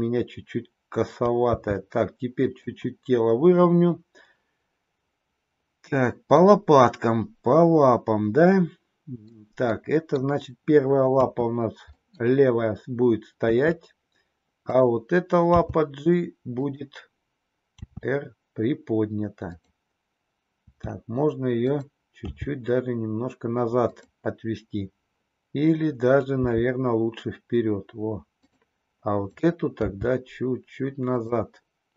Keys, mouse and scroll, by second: 1.5 g, 6.4-9.2 middle drag, 9.6 scroll up 1, 9.8 middle click, 11.0 KP_3, 11.9 middle click, 12.1 scroll down 1, 13.4 KP_3, 14.6 click, 15.5 g, 17.8 r, 20.5 r, 22.2 g, 26.4 g, 29.0 click, 29.9 g.